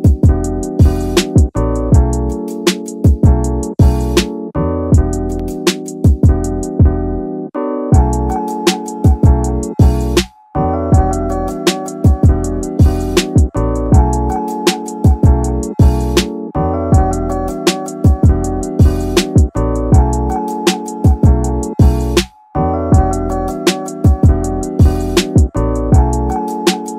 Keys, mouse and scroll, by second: 1.7 shift+d, 2.2 shift+right click, 2.2 shift+d, 2.4 shift+d, 2.4 shift+d, 3.0-4.6 drag, 5.3-6.6 drag, 7.2-7.6 scroll up 1, 8.2-8.8 drag, 8.2-8.7 scroll down 1, 9.3-10.9 drag, 12.5 click, 16.0-17.3 scroll down 4, 16.3-16.6 middle drag, 17.0-17.3 middle drag, 18.5 shift+right click, 18.7 shift+d, 19.5 click, 20.9-22.1 drag, 23.1-25.1 drag, 25.5-26.4 scroll up 2, 25.9-26.4 middle drag.